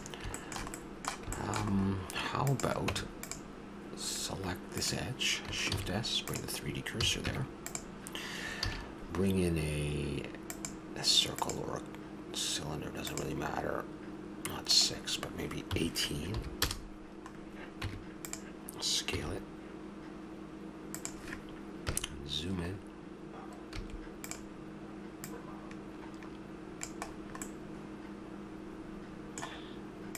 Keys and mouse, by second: 2.9 Tab, 5.7 shift+s, 7.0 a, 7.2 Tab, 8.6 shift+a, 14.7-16.6 drag, 17.4 middle click, 17.8 Tab, 19.1 s, 21.8 KP_Decimal, 23.8 s, 25.2-27.1 drag, 27.2 s, 27.3-28.5 middle drag.